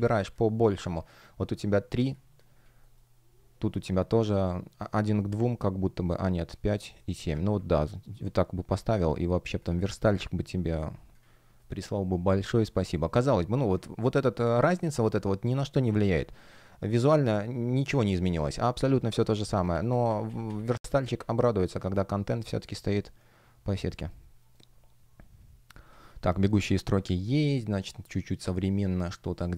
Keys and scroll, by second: 5.4 space, 11.5 shift+g, 12.6 shift+o, 16.9 shift+o, 19.2 super+z, 21.1 space, 21.6 shift+o, 23.8 shift+g, 25.8 space.